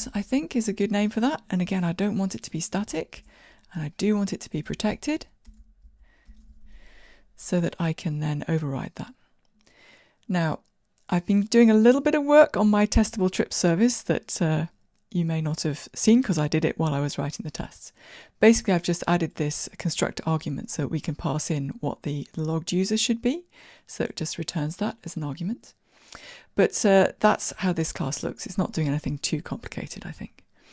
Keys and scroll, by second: 0.8 Return.